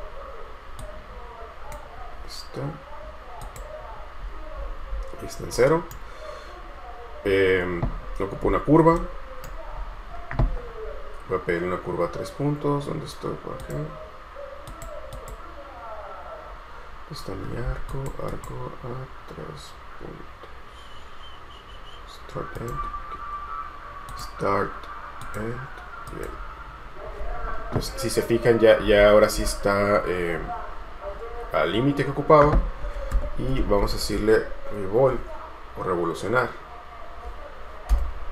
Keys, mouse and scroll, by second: 5.7 right click, 8.6-9.1 scroll up 1, 9.1 right click, 9.9-10.7 scroll up 1, 15.3 double click, 28.1-29.2 scroll up 1, 33.4-34.7 typing, 38.1 Return.